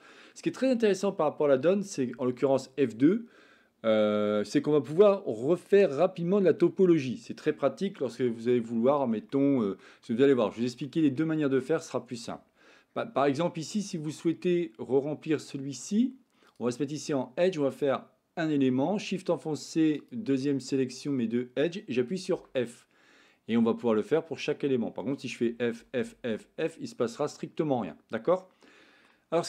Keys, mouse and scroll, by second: 9.2 shift+middle click, 10.1 middle click, 10.8 shift+middle click, 11.8 middle click, 16.5 click, 17.6 click, 19.9 shift+click, 22.2 f, 25.4 f, 25.7 f, 25.9 f, 26.3 f, 28.4 middle click.